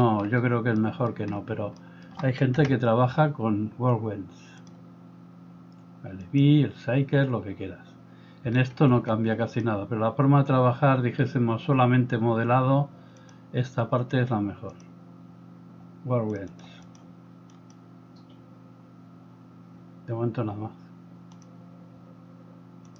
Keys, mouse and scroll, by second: 2.6 KP_0, 16.8 middle drag, 17.0-22.9 drag.